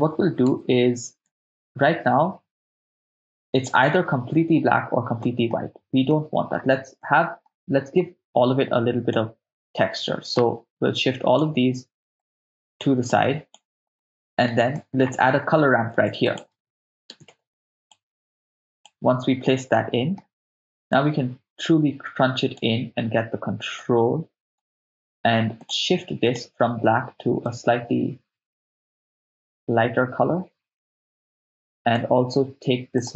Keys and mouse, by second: 0.7 shift+space, 1.3 shift+space, 5.2 middle click, 6.1 middle click, 7.0 ctrl+middle click, 8.0 click, 9.1 click, 10.4-12.8 drag, 13.1 click, 14.0 middle click, 14.7 middle click, 15.9 shift+a, 19.7 ctrl+middle click, 21.0-22.6 drag, 23.8-25.7 drag, 26.3-28.3 drag, 33.0 click.